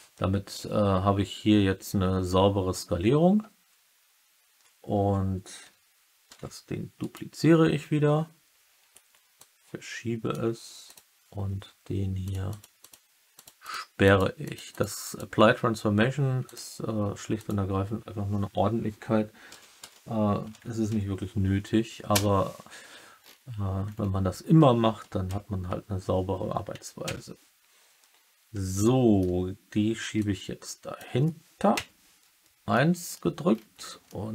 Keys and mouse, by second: 6.2 shift+d, 6.9 right click, 9.3-10.2 drag, 10.8 click, 12.2 click, 12.4 click, 12.7 click, 13.3 click, 13.5 click, 14.0 click, 14.4 click, 14.6 click, 15.0 click, 16.4 click, 17.3 click, 19.4 r, 19.7 z, 20.4 9, 20.8 0, 22.0 Return, 25.3 KP_3, 27.0 KP_1, 28.7-29.2 alt+middle drag, 30.1 click, 31.6 KP_1, 32.7 middle click, 34.0-34.3 middle drag.